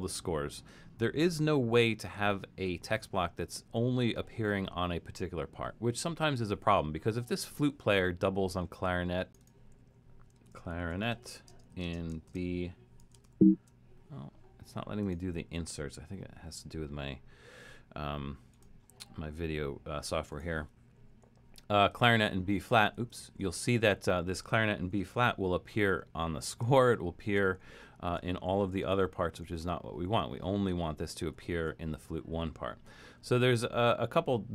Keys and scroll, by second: 10.2-12.3 typing, 13.3 shift+super+f, 23.2 super+z, 25.1 alt+super+,, 26.5 alt+super+., 28.3 alt+super+., 28.9 alt+super+., 29.4 alt+super+., 29.9 alt+super+,, 30.5 alt+super+,, 31.3 alt+super+,.